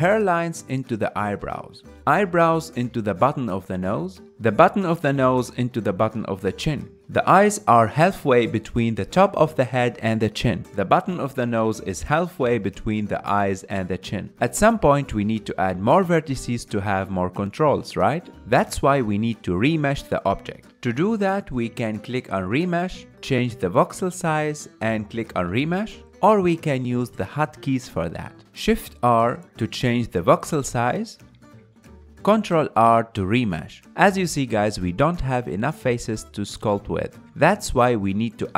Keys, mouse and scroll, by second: 0.3 shift+middle click, 1.0 shift+click, 1.4-3.7 shift+middle drag, 3.7 KP_1, 4.7-7.7 shift+middle drag, 7.9-17.4 ctrl+middle drag, 17.4-20.7 drag, 27.4 shift+r, 33.4 ctrl+r, 35.4-38.4 middle drag.